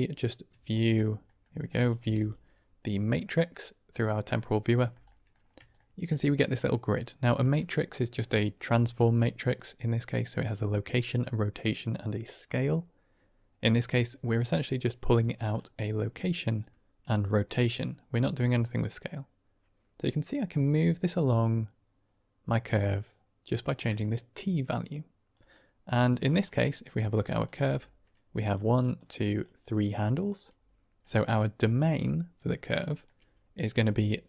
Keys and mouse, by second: 0.6 ctrl+click, 1.3 middle click, 1.7 click, 1.9 g, 5.0 drag, 5.6 shift+drag, 15.4-23.7 shift+drag, 24.4-25.2 drag, 26.1 middle drag, 26.6 click, 27.2 click, 27.5 Tab, 28.2 click, 28.7 click, 29.3 click, 29.9 middle click, 32.9 shift+middle click, 33.9-34.2 d, 34.1 click.